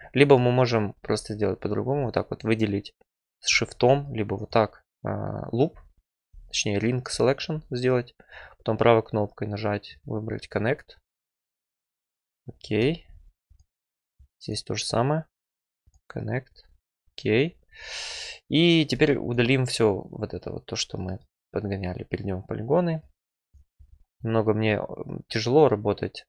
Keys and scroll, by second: 0.9 2, 16.7 Return, 23.9 Return, 25.2 Delete.